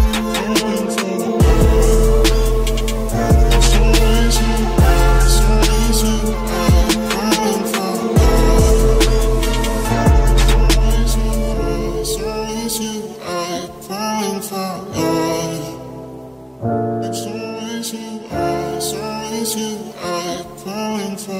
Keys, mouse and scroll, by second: 0.8 ctrl+r, 1.8-3.0 right drag, 2.6 b, 3.0 click, 3.0 g, 5.8 click, 6.0 b, 6.4 g, 7.2 b, 8.1 g, 11.2 ctrl+s, 13.1 Tab, 13.2 z, 13.9 z, 14.3 a, 16.7 z, 16.7 a, 17.9-20.0 drag, 21.2 r.